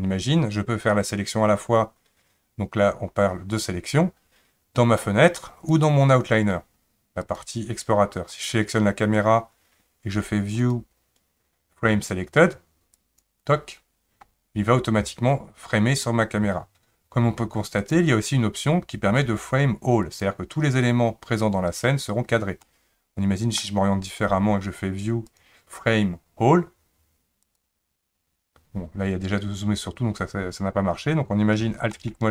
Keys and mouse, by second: 5.8 click, 7.3 click, 10.7-13.3 drag, 17.8-20.3 drag, 22.6-23.6 middle drag, 25.2-27.6 drag, 31.9 alt+middle click.